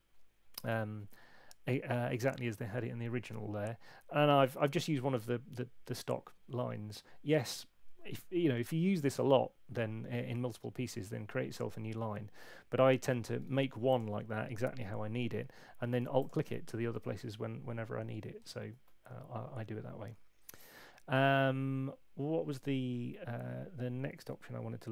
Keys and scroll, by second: 0.6 super+8, 18.4 super+z.